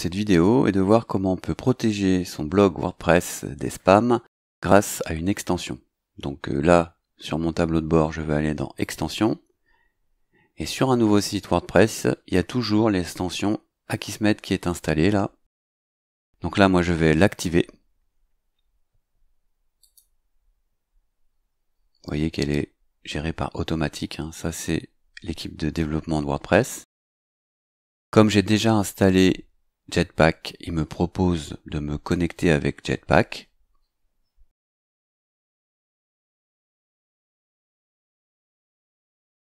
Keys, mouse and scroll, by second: 8.8 click, 19.8 click, 35.9 click.